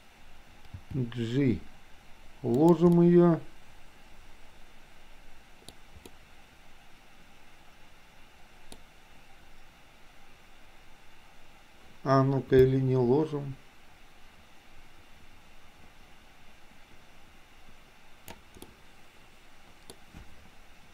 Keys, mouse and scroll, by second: 0.8 g, 3.0-5.7 middle drag, 6.1-8.7 middle drag, 12.7-18.5 drag, 18.7-20.0 middle drag.